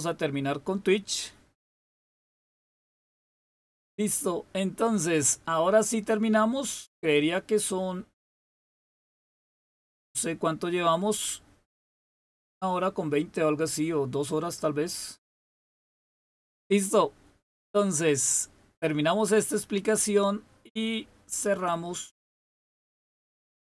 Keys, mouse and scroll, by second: 22.2 click.